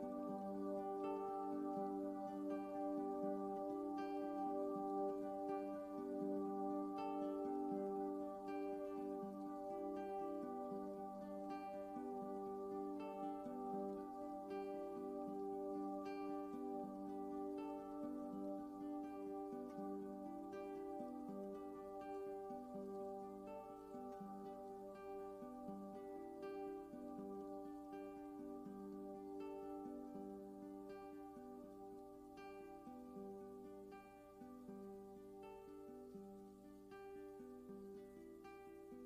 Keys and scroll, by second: 0.9 super+[, 32.0 Down, 32.9 Right, 37.2 super+c, 37.8 super+f, 38.4 shift+Right.